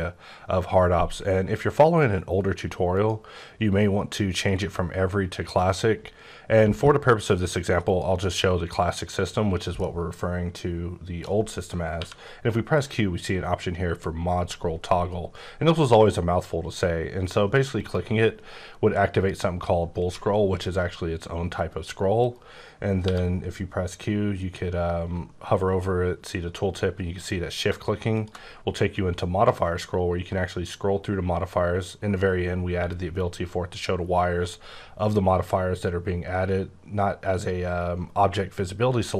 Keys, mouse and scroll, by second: 2.9 click, 9.0 click, 9.8 middle click, 11.9 q, 17.7 q, 18.0 click, 18.4-20.5 scroll up 10, 20.6-22.2 scroll up 8, 22.3 right click, 23.0 q, 28.1 shift+click, 28.7-30.5 scroll up 11, 30.5-31.6 scroll down 12, 31.6-33.9 scroll up 11, 33.9-34.9 scroll down 4, 34.9 scroll down 3, 35.4-37.8 scroll up 10, 37.8-38.3 scroll up 2.